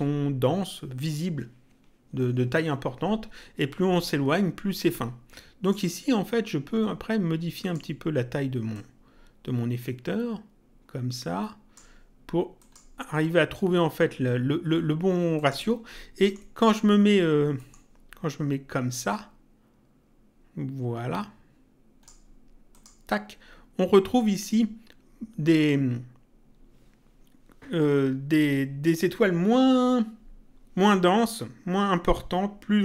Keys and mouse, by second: 5.6 click, 7.6 click, 8.7 click, 12.5 click, 15.3 click, 16.2 middle click, 17.5 middle click, 19.0 click, 22.7 click.